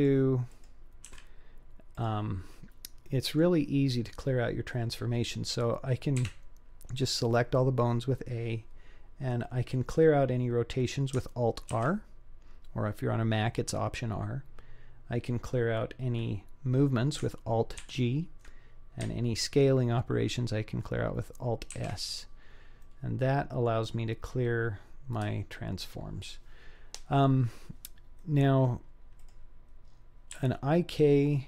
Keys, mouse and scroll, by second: 0.5 click, 1.1 g, 2.4-2.7 scroll down 3, 3.1 middle click, 3.9-4.5 scroll up 2, 4.5 scroll down 1, 4.6-5.1 scroll down 1, 6.3 a, 11.8 alt+r, 17.8 alt+g, 21.8 alt+s, 22.8-23.7 middle drag, 28.2-28.7 middle drag, 29.2 drag, 29.8-30.3 scroll up 3, 30.3 g.